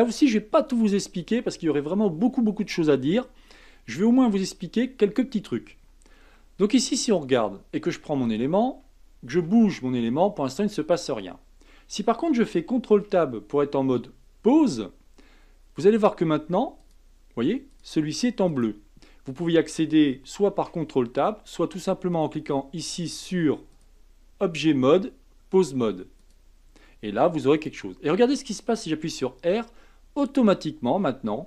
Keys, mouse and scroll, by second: 6.3-8.2 shift+middle drag, 8.2 click, 9.4 r, 12.9 ctrl+Tab, 15.8 click, 16.8 click, 17.7 click, 18.5 click, 20.5 ctrl+Tab, 23.7-26.7 drag, 27.5 click, 29.0 r.